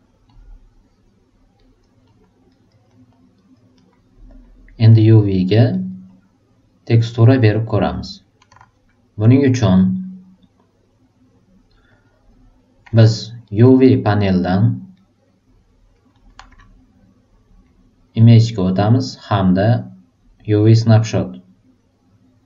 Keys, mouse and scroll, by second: 0.3 click, 1.5 right click, 2.0 middle click, 2.5 right click, 2.8 middle click, 3.3 right click, 3.7 alt+super+middle click, 4.4 alt+super+click, 5.0 alt+super+right click, 5.3 alt+super+middle click, 5.7 alt+super+right click, 6.0-7.6 alt+super+drag, 11.9 click, 13.4 alt+right click, 14.4 alt+middle click, 14.9-15.9 alt+right drag, 16.1 alt+middle click, 18.1 click, 20.9 click.